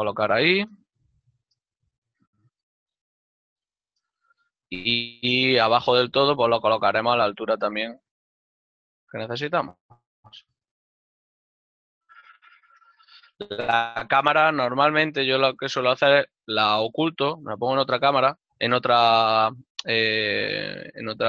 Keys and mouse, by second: 0.7 shift+middle click, 3.8 KP_0, 7.0 shift+middle click, 9.1 middle click, 18.2 m.